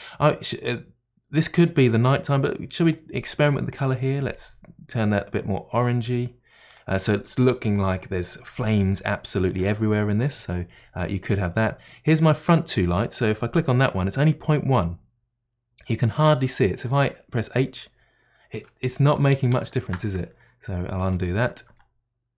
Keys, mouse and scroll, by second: 2.8 click, 3.7 click, 11.5-13.0 middle drag, 13.0 click, 17.6 h, 22.0 ctrl+z.